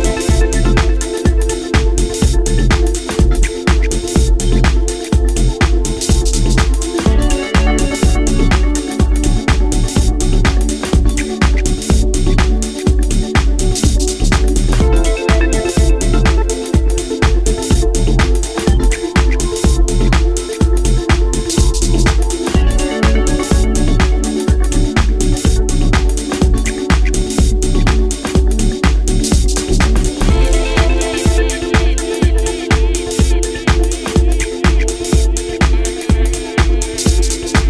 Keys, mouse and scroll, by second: 0.3 KP_1, 1.5 g, 3.1 click, 3.5 middle click, 6.2 right click, 6.7 right click, 7.5 shift+right click, 7.7 shift+right click, 9.0 ctrl+j, 11.1 Tab, 18.2 click, 18.9-19.4 scroll up 3, 19.4 shift+middle click, 19.9-20.5 scroll up 2, 21.4 z, 25.9 click, 26.4-26.8 scroll down 3, 28.3 z, 29.3-29.8 scroll up 1, 30.3 alt+right click, 30.3-30.8 scroll up 1, 31.1 alt+shift+right click, 31.8 s, 35.8 click, 36.1-37.3 scroll down 6, 37.5 Tab.